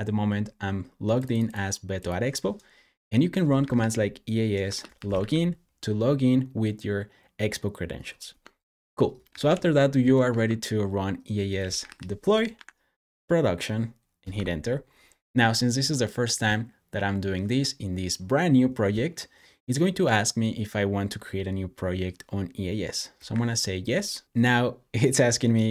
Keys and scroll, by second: 3.2-5.5 typing, 8.2-10.1 typing, 11.2-12.3 typing, 12.4 Up, 14.2 Return, 22.9-23.7 typing.